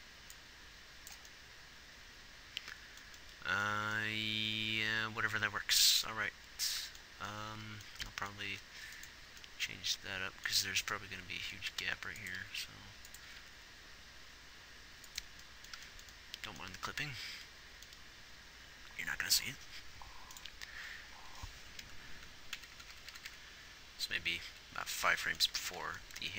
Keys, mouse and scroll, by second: 6.6-9.0 middle drag, 9.0 a, 9.6 z, 11.2 z, 12.1 r, 12.9 r, 14.5 r, 20.8-23.0 right drag, 23.0-23.8 Left, 24.9 Left, 26.0-26.3 typing.